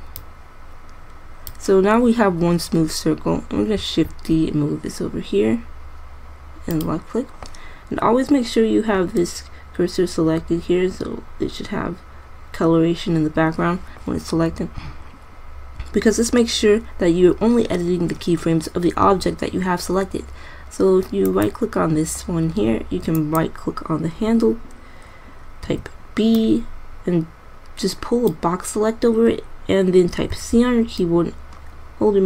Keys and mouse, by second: 4.5 shift+d, 7.3 drag, 21.7-23.2 right drag, 26.0 b, 30.7 c.